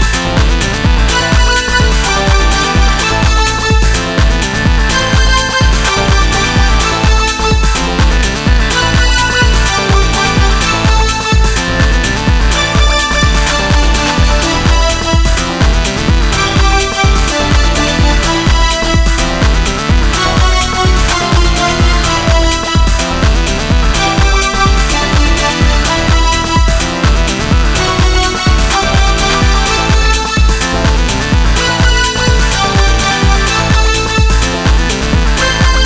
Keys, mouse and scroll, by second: 0.2 s, 3.7-5.0 drag, 4.0 s, 5.3 middle click, 5.7 Tab, 9.3 middle click, 10.0 middle click, 13.5 middle click, 13.7 middle click, 13.9 middle drag, 16.1 Tab, 21.0 s, 24.6-25.6 middle drag, 24.8 s, 26.8 Tab, 27.8-29.5 middle drag, 30.2 middle click, 30.4-32.2 middle drag, 34.3-35.8 middle drag.